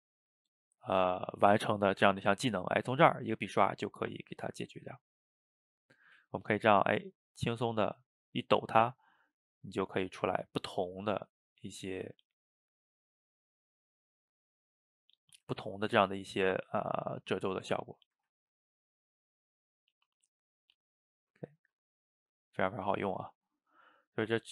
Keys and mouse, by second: 0.6-1.7 middle drag, 1.7 ctrl+z, 2.3-3.4 drag, 3.4-4.8 middle drag, 4.8-5.9 drag, 5.9 middle click, 6.2 ctrl+z, 6.6-8.5 drag, 8.5 middle click, 8.8 ctrl+z, 9.2-12.1 drag, 12.1 ctrl+z, 12.4-13.7 drag, 13.7 middle click, 14.6 click, 15.0 middle click, 15.6 ctrl+z, 15.9 click, 16.6 middle click, 17.2 click, 18.0 middle click, 18.3 ctrl+z, 18.6 click, 19.5-21.5 middle drag, 21.5-22.7 drag, 22.7 middle click, 23.2 ctrl+z, 23.4 middle click, 23.8 click.